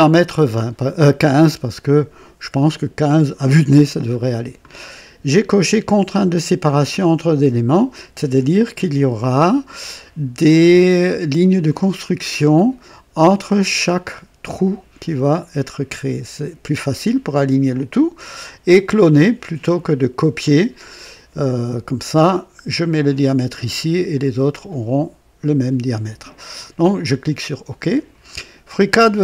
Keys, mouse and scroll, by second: 5.3 scroll up 2, 27.7 click.